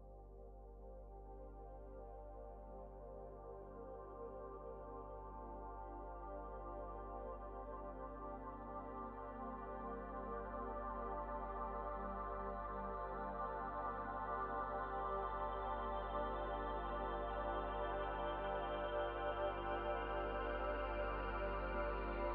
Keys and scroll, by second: 10.6 space, 14.3 space.